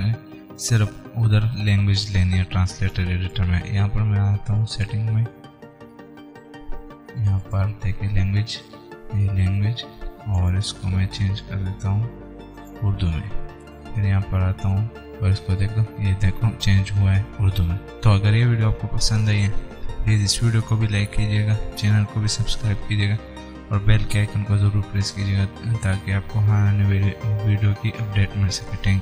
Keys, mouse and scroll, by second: 3.2-5.0 drag, 6.4 scroll down 1, 7.7 click, 13.9 click, 17.9 click.